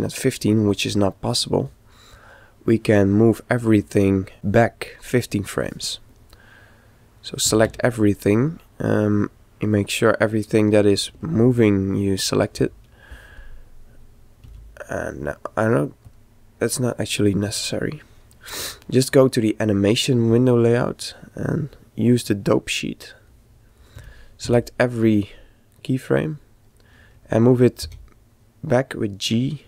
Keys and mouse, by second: 7.4 a, 7.7 a, 8.4-10.3 middle drag, 11.6-13.4 middle drag, 14.4 a, 15.5 click, 25.2 a, 27.9 g.